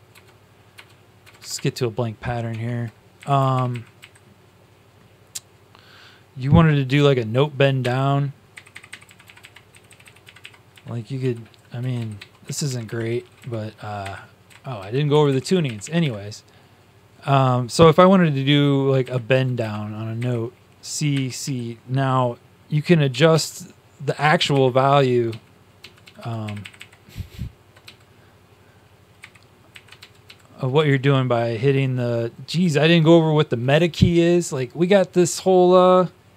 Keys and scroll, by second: 0.0-1.3 typing, 2.4 shift+Tab, 3.5 Up, 7.7 q, 8.5 q, 9.0 q, 9.3 Up, 9.6 Delete, 10.2 Delete, 10.6 Up, 11.1 m, 11.5 Down, 12.4-12.8 typing, 13.9 Up, 13.9 q, 15.0 Up, 15.0 Delete, 15.0 Down, 15.2 Delete, 15.5-16.3 typing, 19.0-19.7 typing, 21.0 typing, 23.2 Up, 23.2 ctrl+Down, 24.4 ctrl+Up, 25.2 ctrl+Down, 25.7 ctrl+Down, 26.4 ctrl+Up, 26.6 ctrl+Up, 26.7 ctrl+Up, 27.7 Down, 29.1 q, 29.9 ctrl+Down, 30.2 ctrl+Down, 30.7 ctrl+Up, 32.4 ctrl+Down.